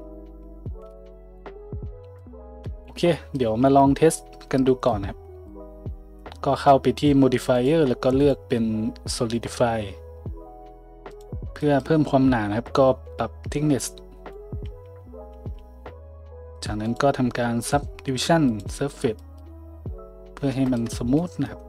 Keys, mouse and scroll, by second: 0.9 b, 2.2-7.6 drag, 3.6 Tab, 7.6 middle click, 8.2-21.6 drag, 14.6 z, 15.3 z.